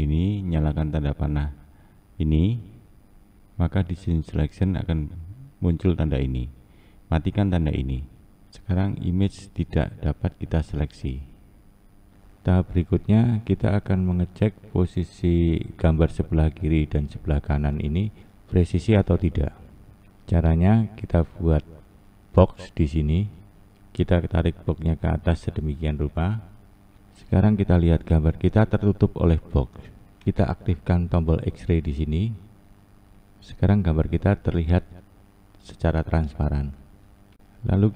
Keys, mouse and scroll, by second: 7.2-8.8 drag, 10.1-11.0 scroll up 1, 11.0-11.8 scroll up 5, 11.8 scroll down 2, 12.1-14.3 shift+middle drag, 13.6-14.3 scroll up 3, 14.3-18.5 scroll down 1, 18.7 scroll up 1, 19.3-24.0 scroll down 1, 24.0-26.0 drag, 24.6-26.0 scroll down 1, 32.2-37.9 drag, 37.5-37.9 scroll up 3.